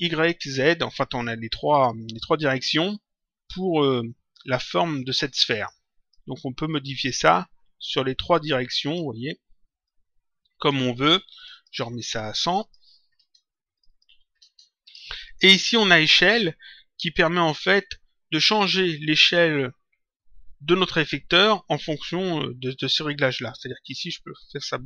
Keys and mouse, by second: 4.9 click, 7.2 click, 9.8 click, 11.3 click, 13.7 click, 14.8 Return, 24.1 click.